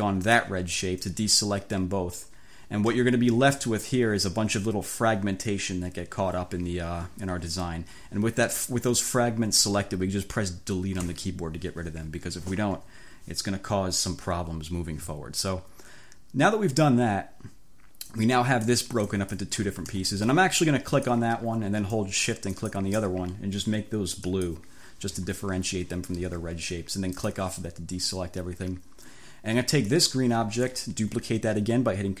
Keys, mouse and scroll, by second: 0.3 shift+click, 3.2-3.7 ctrl+scroll up 2, 11.1 Delete, 12.8 1, 18.2 click, 19.2 click, 19.8 ctrl+z, 21.0 click, 22.6 shift+click, 24.4 click, 27.2 click, 29.9 click.